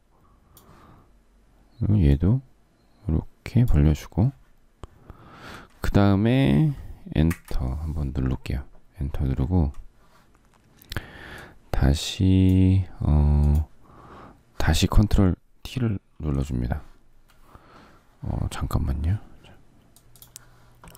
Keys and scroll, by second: 7.1 Return.